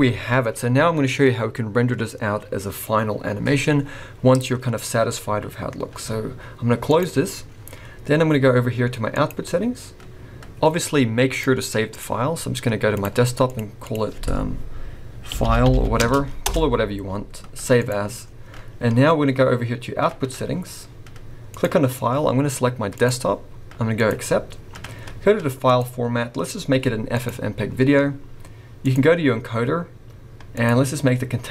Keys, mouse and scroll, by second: 9.1 click, 11.3 click, 21.5 click, 25.6 click, 28.9 click, 29.4 scroll down 1, 30.5 click.